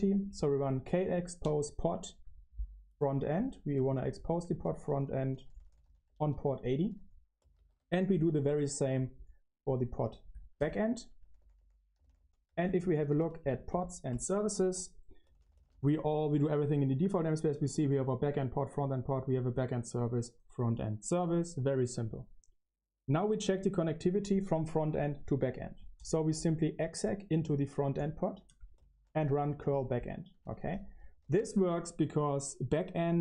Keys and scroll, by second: 3.4-8.4 typing, 10.5-17.9 typing, 13.6 Return, 19.4-20.1 typing, 28.2 ctrl+l, 28.6-33.2 typing.